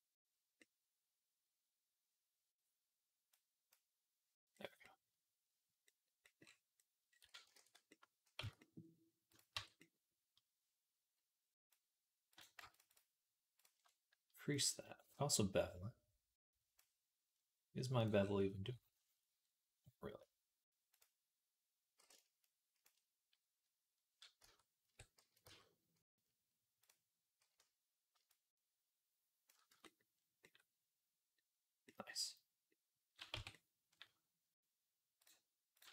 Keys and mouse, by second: 0.5 right click, 1.1-4.4 right drag, 3.1 click, 4.4 click, 4.8 click, 5.8 click, 6.3 click, 7.0 ctrl+click, 7.4 ctrl+s, 7.8 click, 8.2 Tab, 8.8-21.9 drag, 9.4 Tab, 12.1 right click, 12.6-13.6 alt+shift+right drag, 14.4-19.2 right drag, 24.2 Tab, 24.7 Tab, 25.0 a, 25.3 q, 29.5 Tab, 31.7-35.9 drag, 33.2 Tab.